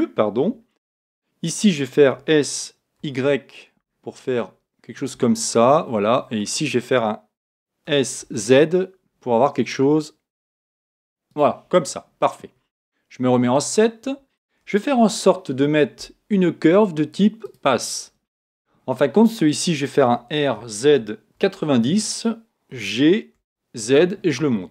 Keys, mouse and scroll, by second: 2.1 s, 5.4-7.2 middle drag, 7.8 s, 11.3 click, 11.7 middle click, 13.0 middle click, 13.3 KP_7, 14.9 shift+a, 20.1 r, 22.7 g.